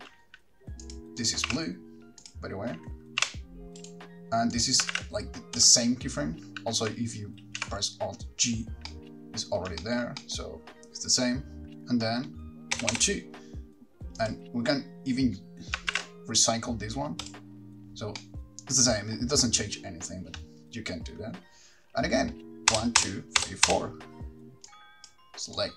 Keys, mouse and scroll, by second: 1.0 click, 1.4 click, 2.5 r, 3.4 r, 4.1 right click, 4.7 click, 5.1 shift+d, 5.9 click, 7.6 alt+g, 9.1 middle click, 10.0 shift+middle click, 10.4 middle click, 13.0 Right, 13.1 Right, 14.4 click, 16.1 shift+d, 17.5 click, 18.4 middle click, 22.9 Right, 23.2 Right, 23.6 Right, 23.9 Right, 24.9 click.